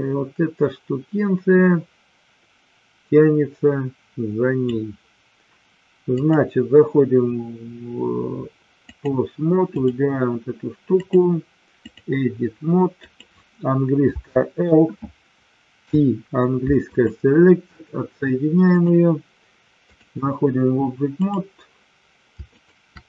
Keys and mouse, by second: 6.3-9.1 drag, 9.6 click, 11.1-12.0 drag, 13.0 click, 14.1 l, 15.7 p, 18.6-20.0 drag, 21.1 click, 22.5 shift+click.